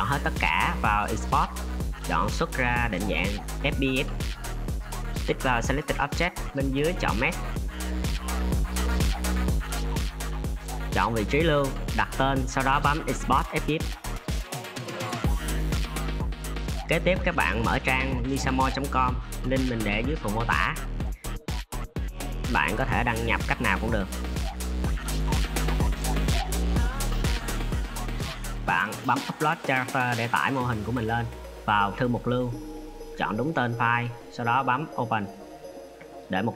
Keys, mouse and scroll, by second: 0.7-3.8 drag.